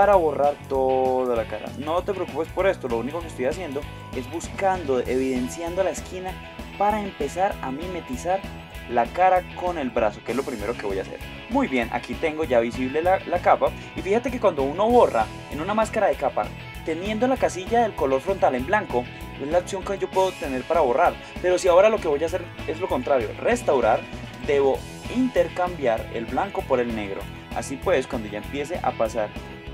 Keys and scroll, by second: 2.2 space, 3.4 space, 5.3 space, 6.7 space, 8.1 space.